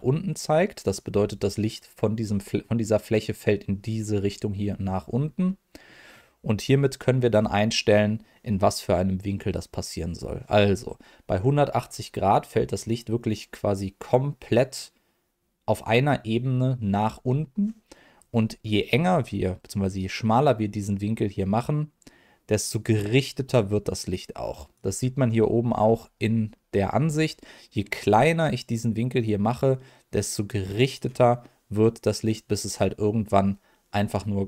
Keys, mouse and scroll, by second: 0.5 middle click, 5.4 middle click, 18.6 middle click, 20.0-24.7 drag, 27.7-30.9 drag.